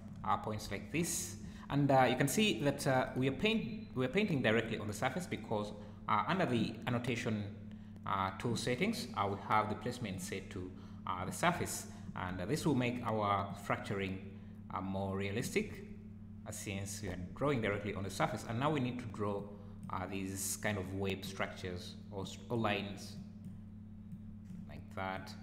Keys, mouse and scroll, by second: 0.3 `, 1.7 `, 3.3 `, 4.1 `, 10.1 click, 11.6 `, 12.0 `, 12.6 `, 13.5 click, 17.5 `, 18.0 `, 19.4 click, 20.8 click, 22.2 click, 23.2 click, 24.1 click, 25.1 click.